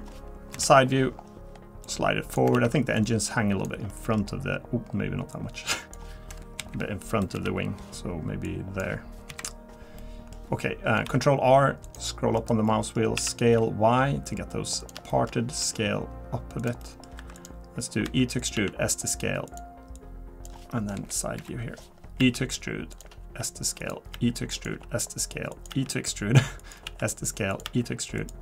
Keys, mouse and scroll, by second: 0.5 KP_3, 1.1 scroll up 2, 1.8 click, 1.8-2.4 scroll up 2, 2.5 ctrl+z, 3.0 click, 3.9 middle click, 5.3 click, 6.6 KP_1, 7.3 KP_7, 8.4 click, 9.3 KP_3, 10.0 middle click, 11.0 ctrl+r, 12.7 middle click, 13.2 s, 15.1 shift+middle click, 15.6 s, 16.8 middle click, 17.2 3, 17.3 click, 18.0 e, 18.5 s, 19.9 click, 20.9 KP_1, 21.4 KP_3, 22.2 e, 23.2 s, 24.1 e, 24.7 s, 25.7 e, 26.8 s.